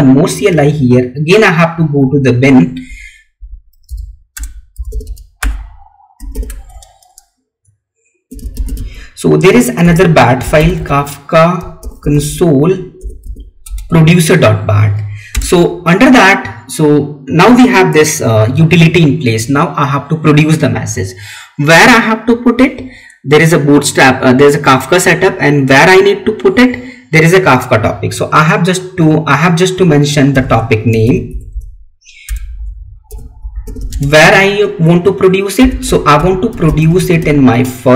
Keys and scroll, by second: 6.4 Tab, 13.6 Tab, 15.6 space, 33.8 space.